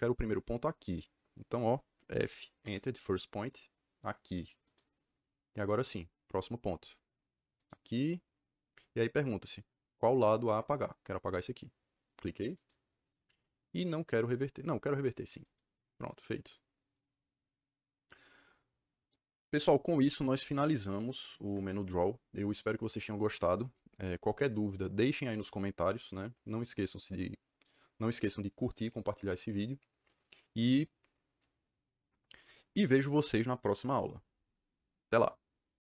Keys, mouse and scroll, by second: 2.0 f, 2.5 KP_Enter, 4.6 click, 7.5 click, 12.4 click, 15.3 click.